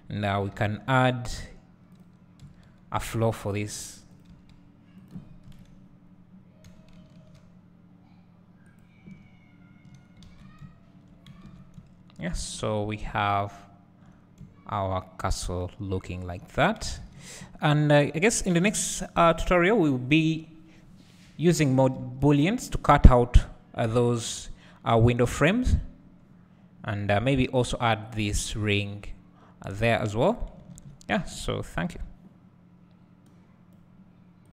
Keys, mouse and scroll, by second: 2.0-3.5 drag, 3.7 g, 5.0 s, 5.1 click, 6.7 g, 8.8 click, 9.5 click, 10.3 alt+a, 16.5 scroll up 1, 17.4 `.